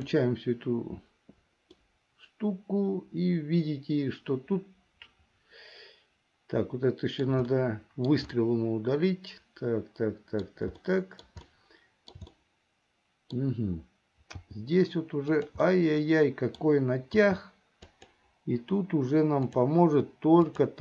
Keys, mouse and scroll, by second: 0.2 click, 1.9-7.6 middle drag, 7.7 shift+middle click, 8.5-10.7 middle drag, 11.0 shift+middle click, 11.6 shift+middle click, 12.4-13.5 middle drag, 14.6 g, 15.9 middle click, 17.4 g, 19.6 click, 20.5 click.